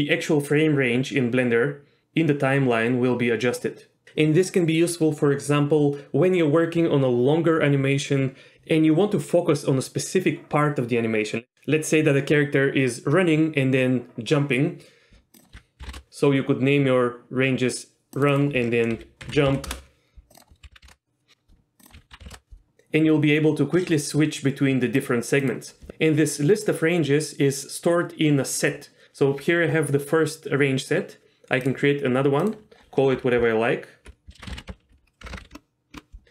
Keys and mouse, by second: 15.4 click, 18.4-21.3 drag, 21.9 click, 22.3 l, 25.2-36.2 drag, 34.1 BackSpace, 35.3 KP_0.